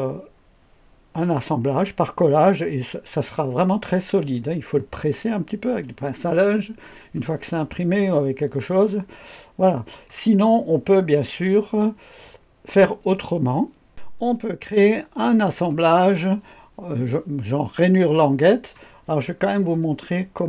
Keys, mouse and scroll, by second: 7.3-7.9 scroll down 1, 7.9-10.0 drag, 13.9 click, 14.2-18.9 scroll up 2, 18.9-20.3 scroll down 2, 20.3 click.